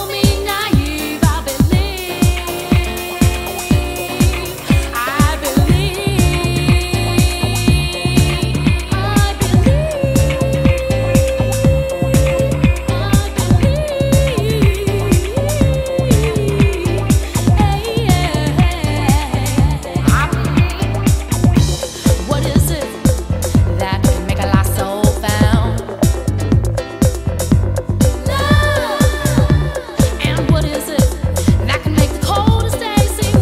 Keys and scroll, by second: 15.1 Escape.